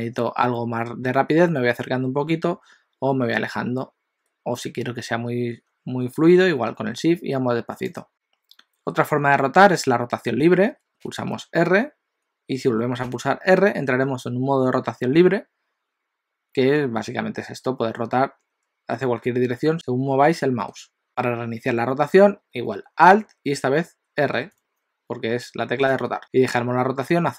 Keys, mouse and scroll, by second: 11.1 r, 25.9 alt+r.